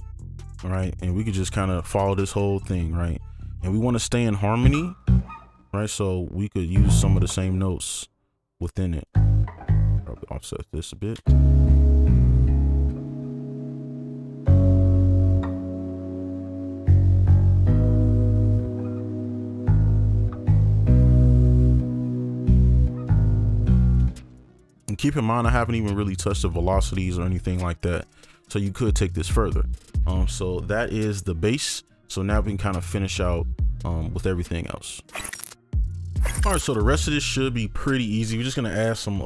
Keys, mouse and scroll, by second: 0.2 shift+click, 3.0 right click, 3.8 ctrl+2, 5.0 double click, 7.7 ctrl+click, 8.7 ctrl+right click, 8.7 ctrl+click, 10.5 alt+click, 11.7 right click, 17.9 alt+click, 24.0 space, 28.0 right click.